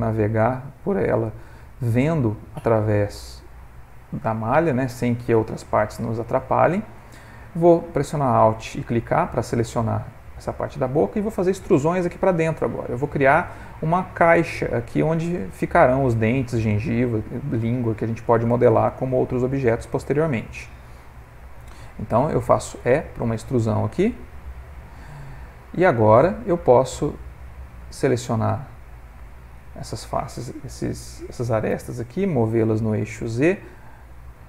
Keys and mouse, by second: 1.7 ctrl+middle click, 2.8 ctrl+middle click, 3.2 middle click, 3.7 shift+middle click, 4.2 middle click, 5.3 Tab, 5.7 middle click, 6.6 ctrl+middle click, 8.0 alt+click, 8.7 middle click, 12.8 middle click, 13.0 middle click, 17.6 middle click, 17.8 middle click, 18.7 ctrl+middle click, 19.3 middle click, 21.0 ctrl+middle click, 22.7 e, 25.8 middle click, 26.4 ctrl+middle click, 27.3 click, 27.9 ctrl+click, 29.3 shift+click, 32.2 g.